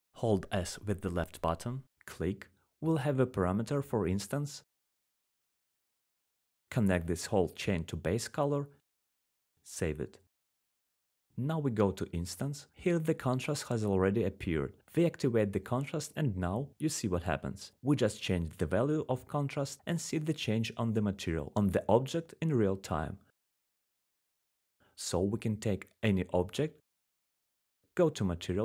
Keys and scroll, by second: 1.4 typing, 2.5-3.8 typing, 5.6-6.7 typing.